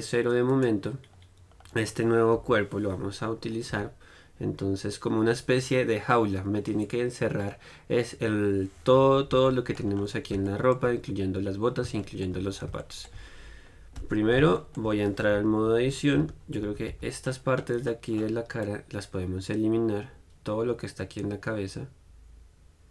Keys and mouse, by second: 0.7-1.8 right drag, 1.8-5.8 middle drag, 2.6 KP_1, 9.7-12.8 middle drag, 14.3 Tab, 15.6 KP_3, 16.4 z, 16.9 a.